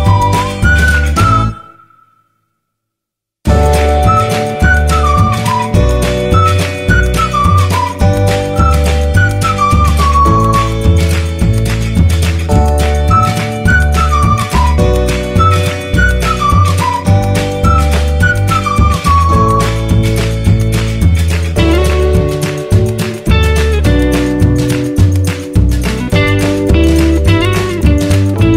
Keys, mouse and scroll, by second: 0.6 shift+c, 1.1 shift+h, 3.2 click, 7.2 ctrl+t, 8.6-16.0 alt+drag, 16.0-21.2 drag, 21.2 Return, 23.4 Return, 25.0 ctrl+z, 27.1 ctrl+t.